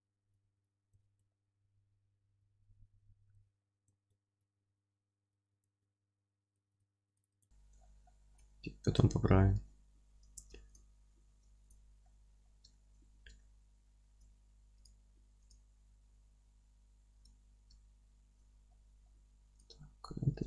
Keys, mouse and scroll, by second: 0.8 scroll down 2, 0.9 Tab, 1.2-2.2 alt+middle drag, 2.2 scroll up 2, 2.3 Tab, 2.3 middle click, 2.7-3.1 scroll down 2, 3.1 scroll up 2, 3.2 scroll down 2, 3.7-5.5 middle drag, 3.7-4.3 scroll up 2, 4.3 Tab, 4.7 ctrl+r, 5.5 click, 5.6 Tab, 5.9-10.7 alt+middle drag, 6.6 scroll up 2, 6.7 ctrl+z, 6.9 scroll down 2, 7.1 ctrl+z, 7.3 Tab, 7.7 scroll down 2, 8.2 scroll up 2, 8.9 scroll down 2, 9.3-9.7 scroll up 2, 10.3 Tab, 10.7 click, 11.1 scroll down 2, 11.3 Tab, 11.7 click, 12.0-14.8 middle drag, 12.4-12.7 scroll up 2, 14.8 click, 17.1 click, 17.8-19.6 alt+middle drag, 18.4 scroll down 2, 18.9-19.6 scroll up 2, 19.6 click, 20.0-20.4 middle drag, 20.3 Tab.